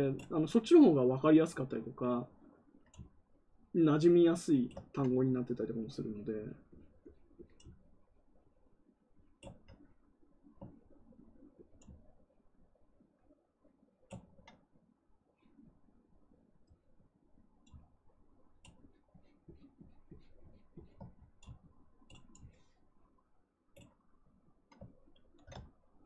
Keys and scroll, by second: 25.1 ctrl+z.